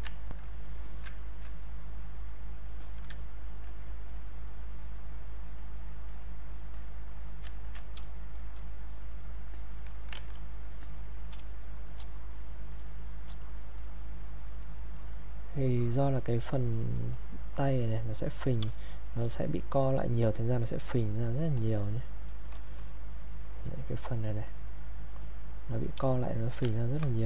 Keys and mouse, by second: 0.2 ctrl+right click, 0.9 alt+click, 1.1 ctrl+right click, 2.8 alt+click, 3.3 ctrl+right click, 5.1 click, 7.5 ctrl+right click, 8.0 space, 8.4 click, 8.5 space, 9.1 click, 10.1 ctrl+z, 10.8 click, 11.4 space, 11.8 click, 11.9 space, 12.1 click, 12.8 space, 13.1 click, 18.7 space, 19.0 click, 19.2 space, 19.3 click, 23.4 click, 26.0 space, 26.3 click, 26.7 ctrl+right click.